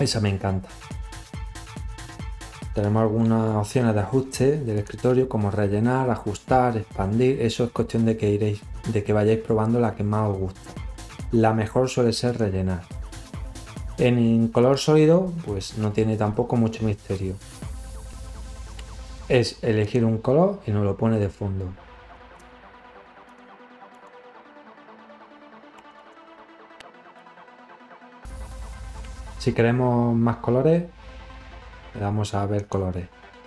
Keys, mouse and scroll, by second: 2.1 click, 9.7 click, 11.1 click, 12.1 click, 16.5 click, 20.0 click, 22.5 click, 22.7 click, 28.0 click, 29.4-33.1 drag.